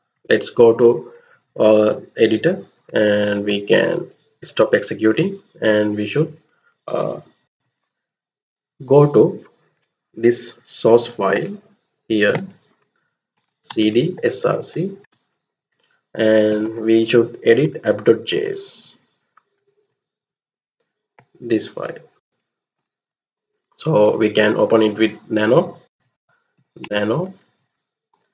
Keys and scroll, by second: 4.5 ctrl+c, 5.0 ctrl+c, 7.1-8.1 typing, 8.3 Return, 13.0-14.7 typing, 15.0 Return, 16.2-16.9 typing, 17.6 Return, 25.6-28.2 typing.